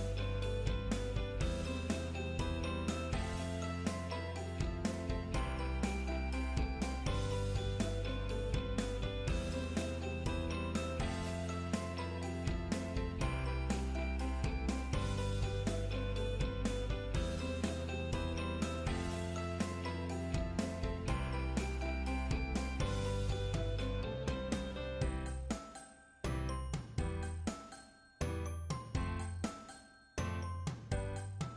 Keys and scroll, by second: 3.1 scroll up 1, 7.1 scroll down 1, 7.3 scroll up 1, 8.0-8.6 scroll down 1, 8.6 scroll up 1, 8.9 scroll down 1.